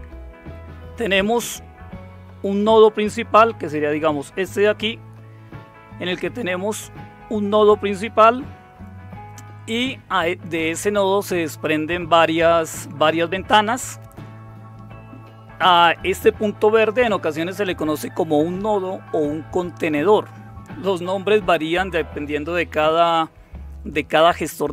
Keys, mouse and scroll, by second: 3.4 Right.